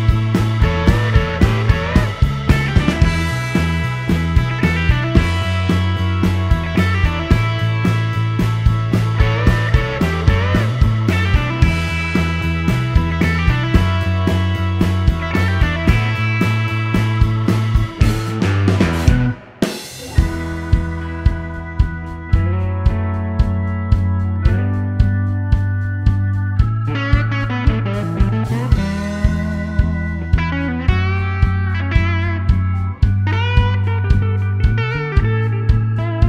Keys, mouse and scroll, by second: 3.0 middle click, 3.2-3.7 scroll up 1, 5.2-5.7 scroll up 1, 6.0-6.7 scroll up 2, 6.9 middle click, 7.3-7.6 scroll up 1, 7.7-10.4 middle drag, 11.5 click, 12.6 click, 13.2 click, 14.1 click, 14.9 click, 16.3 t, 17.1 middle click, 17.5 scroll up 2, 17.9 scroll down 2, 18.3 middle click, 19.4 middle click, 21.1 middle click, 21.8 l, 22.4 click, 23.4 click, 23.7 right click, 24.3 click, 25.6 t, 26.1 middle click, 26.8 middle click, 28.1 click, 29.1 click, 30.0 shift+r, 31.2 4, 31.9 Return, 33.3-33.7 scroll down 2, 35.1-36.2 drag.